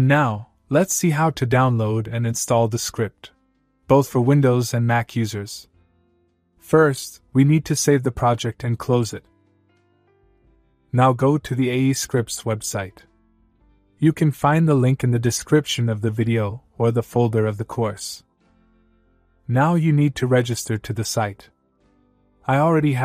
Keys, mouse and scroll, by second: 4.5-5.3 click, 13.2-14.1 click, 16.9 click, 22.4 click.